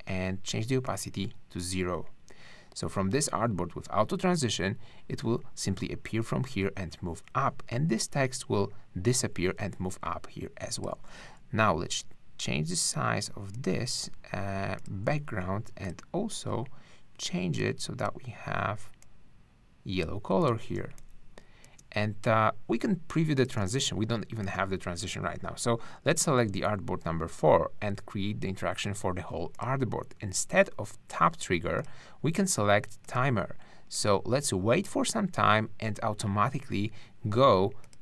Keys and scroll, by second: 20.8 space, 23.6 space.